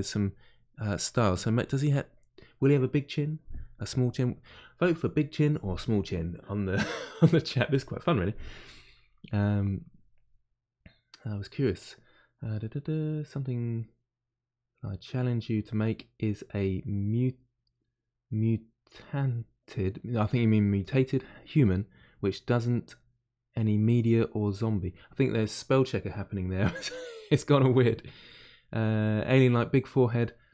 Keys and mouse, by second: 0.0-1.0 middle drag, 1.0 click, 1.6-3.9 shift+middle drag, 3.9-30.5 drag.